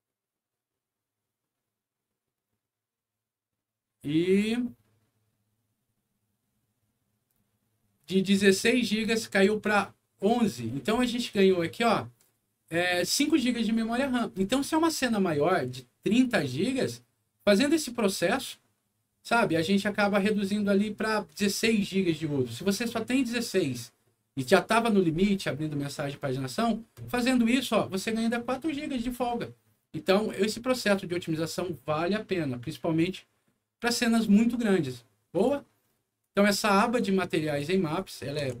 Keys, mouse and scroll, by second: 31.5 click, 33.7 click, 35.3 click, 36.2 click, 37.9 click.